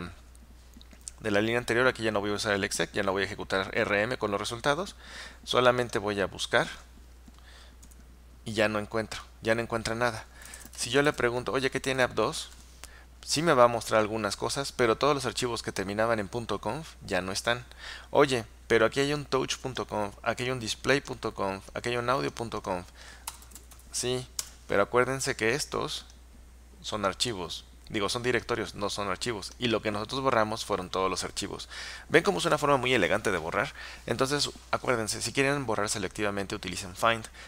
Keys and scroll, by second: 7.9 Return, 10.3-12.3 typing, 23.2-24.3 typing, 24.5 Return.